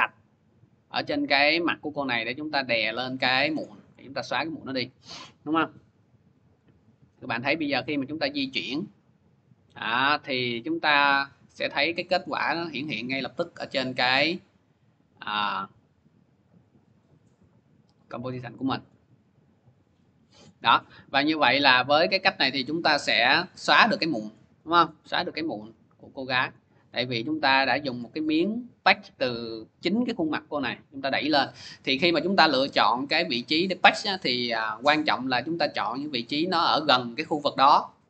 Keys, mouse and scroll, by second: 3.4 click, 4.0 ctrl+z, 6.4 click, 10.0 click, 18.7 click, 19.0 scroll, 22.9 click, 23.5 click, 24.1 click, 24.8-26.0 scroll, 26.2 click, 26.7 click, 27.2-29.1 scroll, 32.4-37.5 drag, 35.0-36.1 scroll down 1, 36.1-37.4 scroll down 1, 37.4-38.0 scroll down 1.